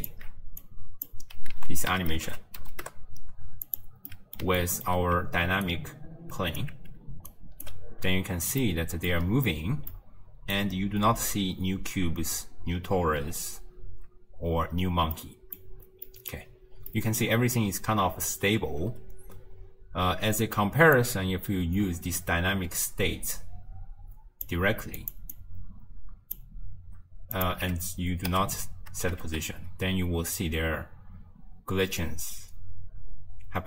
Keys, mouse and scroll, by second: 0.1 alt+shift+click, 0.7 click, 1.6 ctrl+a, 4.2-5.7 middle drag, 5.7-7.0 alt+right drag, 7.0 d, 7.3 right click, 7.7 d, 8.1 space, 8.7-9.2 middle drag, 9.2-10.0 scroll up 2, 10.0 middle click, 10.8-12.1 scroll down 1, 12.1-13.3 scroll up 3, 13.3-15.2 scroll up 3, 15.2-16.6 middle drag, 16.6-17.0 scroll down 1, 17.0 middle click, 17.3-18.9 scroll down 1, 18.9 space, 21.0 click, 25.1 click, 25.4 click, 27.4 click, 28.4 m, 29.3 shift+space.